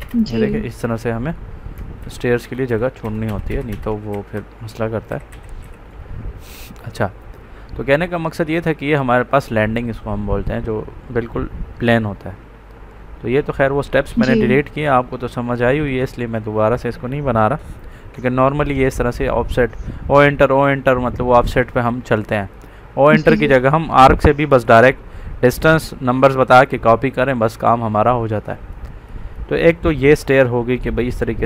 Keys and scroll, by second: 1.9 ctrl+z, 4.0 Escape, 5.0 ctrl+z.